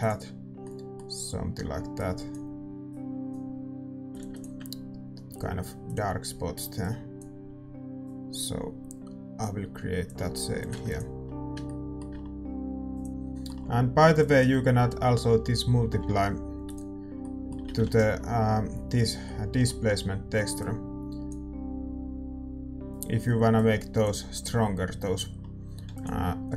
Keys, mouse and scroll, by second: 2.3-16.6 drag, 11.6 ctrl+s, 14.2-16.8 middle drag, 16.6 shift+d, 16.8-18.7 drag, 17.3-20.6 middle drag, 18.7 ctrl+s, 20.6-25.3 drag.